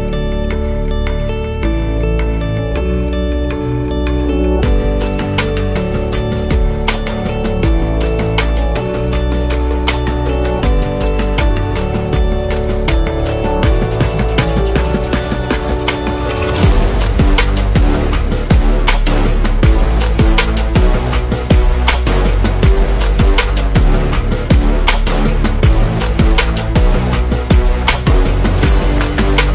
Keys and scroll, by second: 2.2 0, 2.3 Return, 9.0-10.3 typing, 21.2 v, 25.3 super+z.